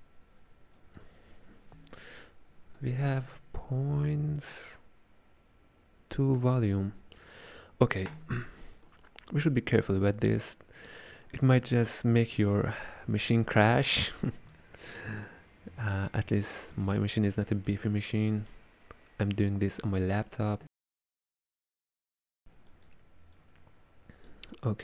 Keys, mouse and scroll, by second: 2.7 shift+a, 17.1-22.7 ctrl+middle drag, 22.7 click, 23.4 click.